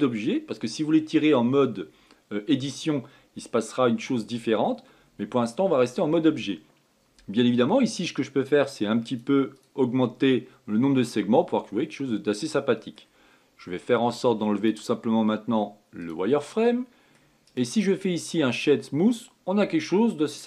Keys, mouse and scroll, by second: 9.8-11.8 drag, 11.8-14.8 middle drag, 15.3-17.3 drag, 17.3 middle click, 18.2-19.9 right drag, 19.9-20.4 middle drag.